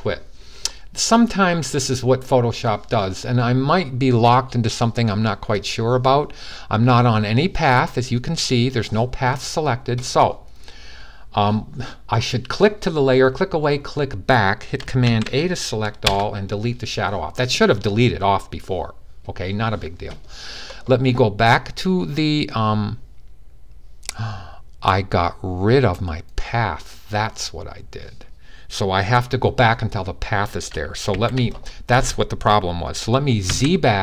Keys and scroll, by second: 14.8 super+a, 30.9 super+d, 33.2 super+z.